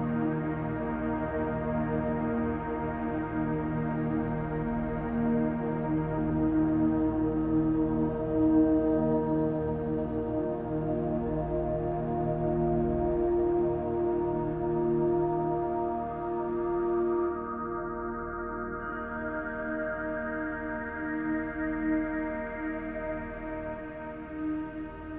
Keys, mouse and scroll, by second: 1.3 click, 1.8-2.5 drag, 3.3-4.0 drag, 4.7 click, 5.4 click, 6.0 middle click, 7.8 click, 8.7 click, 9.1 middle click, 9.8-10.2 shift+middle drag, 10.5-11.0 middle drag, 11.3-11.9 shift+middle drag, 12.1-12.5 scroll up 2, 12.6-13.1 shift+middle drag, 13.4-14.1 right drag, 15.2 middle click, 15.8-16.5 shift+middle drag, 17.5 KP_0, 18.5-19.0 scroll down 3, 19.0 scroll up 1, 19.6-20.2 shift+middle drag, 19.6-20.2 scroll up 3, 20.7-21.9 drag, 20.7 right click, 21.9-22.4 middle drag, 22.9-23.6 scroll down 2, 23.6-24.4 shift+middle drag, 24.7-25.1 middle drag.